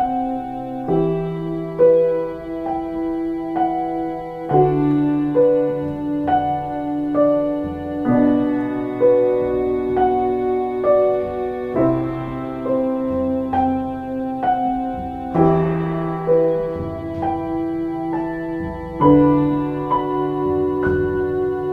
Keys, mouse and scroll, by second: 1.2 x, 1.4 c, 2.3 b, 10.6 ctrl+space.